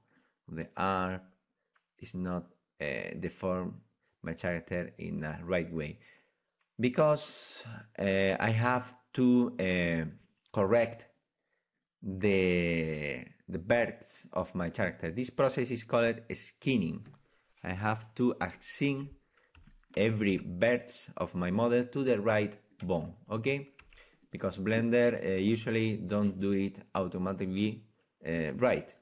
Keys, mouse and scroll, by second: 0.8-2.5 right drag, 1.0 r, 7.3 middle click, 7.8-11.2 drag, 11.2-14.1 middle drag, 14.2-23.0 right drag, 19.9 \, 20.3 Tab, 23.0-24.4 middle drag, 23.8 Tab, 24.1 right click, 24.4-29.0 right drag.